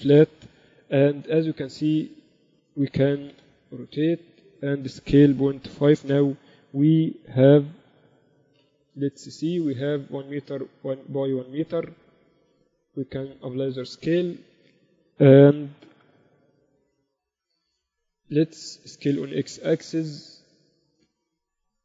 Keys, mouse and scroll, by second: 3.1 r, 5.9 s, 9.3 n, 13.2 ctrl+a, 16.3 n, 16.7 ctrl+Up, 17.5 KP_1, 17.8 z, 19.3 s.